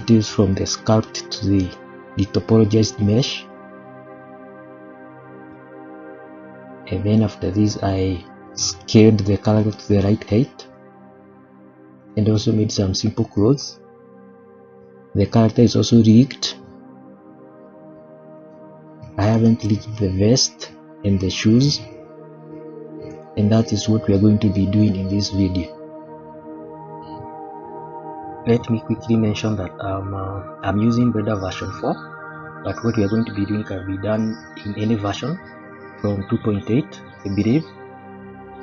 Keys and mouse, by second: 1.2-1.7 middle drag, 3.0-3.5 middle drag, 3.8-5.5 middle drag, 7.2 click, 9.3 shift+middle drag, 9.8 middle drag, 10.2 KP_1, 10.5 shift+middle click, 12.0 click, 13.3-13.8 shift+middle drag, 17.3-17.7 shift+middle drag, 18.8 g, 21.5 g, 24.5-24.9 middle drag, 25.1 shift+middle drag, 25.6 middle drag, 26.3 Page_Up, 28.1-28.6 middle drag, 29.4 shift+middle click, 30.6-31.0 middle drag, 32.9-34.1 middle drag, 37.5 middle click.